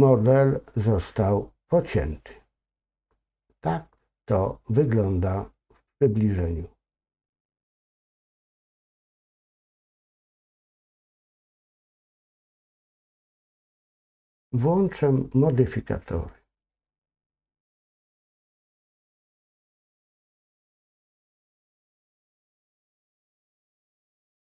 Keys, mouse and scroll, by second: 4.1-5.0 scroll down 2, 5.0 scroll up 1, 7.4 middle click, 16.8 click, 18.5 click, 20.4 click.